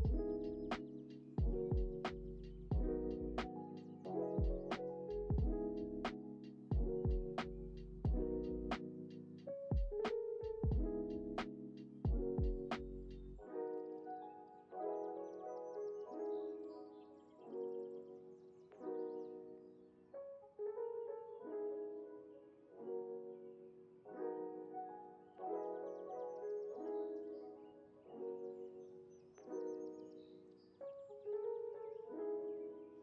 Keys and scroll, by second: 9.1 ctrl+c, 10.4 ctrl+v, 12.4 ctrl+c, 12.6 ctrl+v, 13.9 ctrl+c, 15.4 ctrl+c, 16.6 ctrl+c, 16.7 ctrl+v, 17.8 ctrl+c, 19.0 ctrl+c, 20.3 ctrl+c, 21.4 ctrl+c, 25.5 Delete, 27.8 Delete.